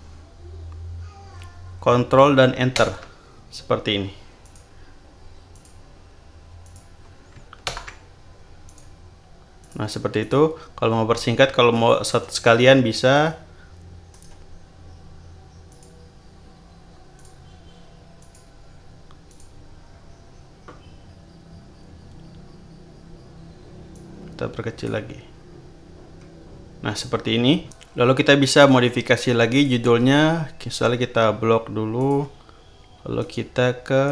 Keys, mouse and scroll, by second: 2.7 ctrl+Return, 4.4 click, 5.5 click, 6.6 click, 7.7 ctrl+Return, 8.6 click, 9.6 click, 10.2 click, 11.7 shift+click, 14.1 right click, 15.7 click, 17.1 click, 18.1 click, 19.3 click, 19.7-20.3 scroll up 3, 23.9 click, 25.9-26.4 scroll up 2, 29.5 click, 31.9 shift+click, 34.0 right click.